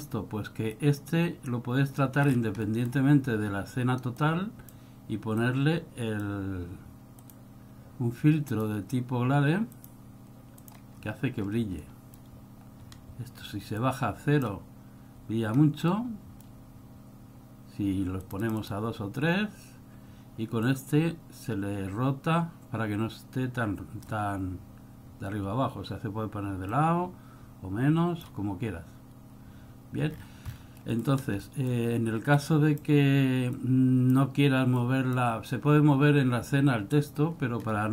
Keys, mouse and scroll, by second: 0.9 click, 2.4 scroll down 5, 2.8 middle click, 4.3 click, 5.5 click, 7.3 click, 11.2-11.8 scroll up 9, 12.0 scroll down 1, 12.1 middle click, 13.0 scroll up 2, 14.0 click, 16.1 middle click, 18.4 click, 18.7 click, 18.8 click, 20.8 click, 26.9 click, 30.4-31.5 scroll down 12, 31.1 middle click, 31.5 middle click, 32.5 click, 33.7 click, 34.9 click, 37.8 middle click.